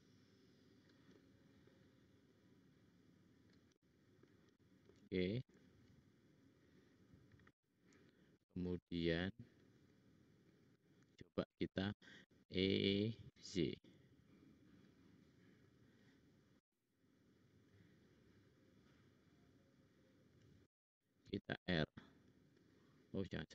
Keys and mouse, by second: 1.1 middle click, 9.5 click, 10.5 click, 11.0 shift+click, 12.3 e, 16.5 f, 21.8 ctrl+r.